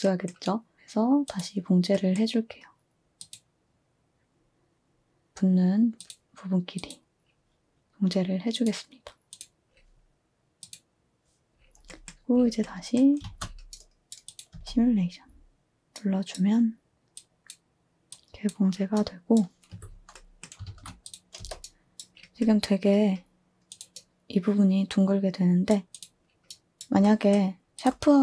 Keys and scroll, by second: 13.2 a, 14.5 space, 20.7 a, 21.4 space, 24.4-25.2 typing.